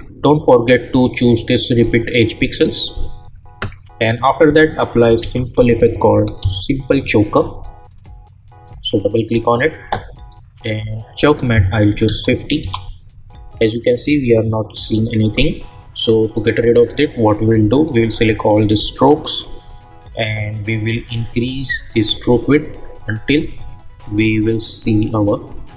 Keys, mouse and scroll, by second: 1.7 click, 4.3 click, 4.9 click, 5.2 ctrl+a, 5.5-6.9 typing, 8.5 click, 11.2 click, 12.6 Return, 17.8 click, 19.2 shift+click, 21.2-25.7 drag.